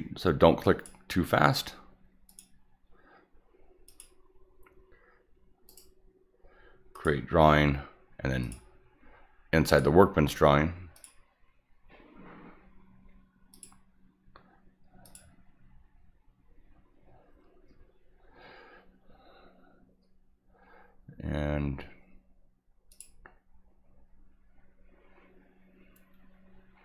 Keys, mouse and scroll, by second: 0.6 click, 2.3 click, 3.9 click, 5.7 right click, 7.0 click, 8.4 click, 9.7 click, 11.0 click, 13.5 click, 15.1 click, 22.9 click.